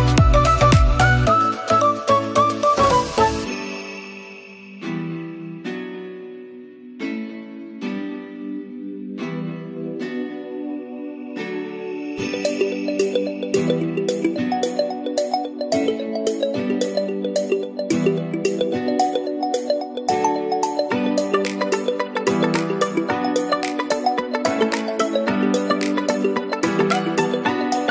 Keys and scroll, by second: 9.3 ctrl+s, 24.9 ctrl+c.